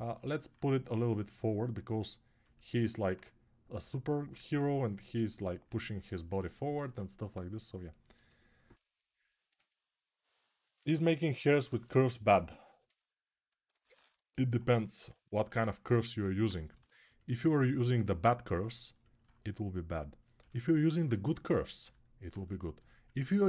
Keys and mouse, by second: 4.1 alt+q, 6.5 alt+q, 7.5-14.7 alt+right drag, 14.7-16.2 alt+shift+drag, 15.8 alt+q, 16.2-22.1 right drag, 16.5 g.